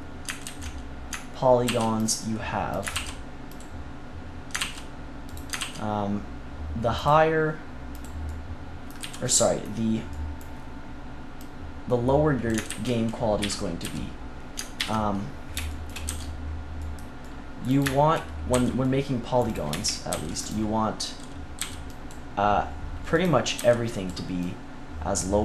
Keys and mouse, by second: 0.4 ctrl+z, 1.6 ctrl+r, 2.7 click, 2.9 ctrl+r, 3.4-4.6 drag, 5.5 ctrl+r, 8.2-9.7 drag, 8.9 z, 11.3-12.6 drag, 12.6 ctrl+z, 13.3 KP_3, 13.8 z, 14.7 ctrl+KP_3, 16.0 c, 18.4 c, 20.0 c, 20.4 click, 21.5-23.2 drag, 21.5 c, 23.5-25.4 drag, 23.5 c.